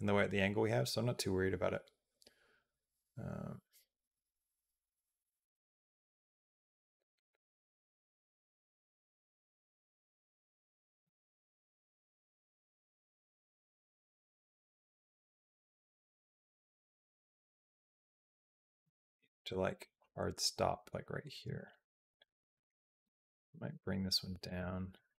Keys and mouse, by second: 22.0 click, 22.3 click, 22.9 g, 24.7-25.1 right drag.